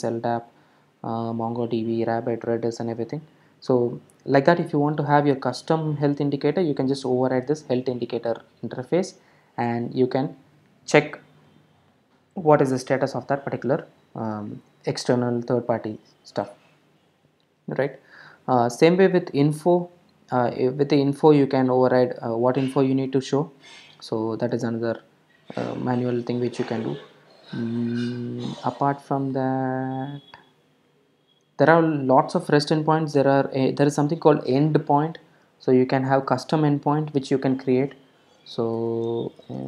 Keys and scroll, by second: 38.7 alt+shift+n.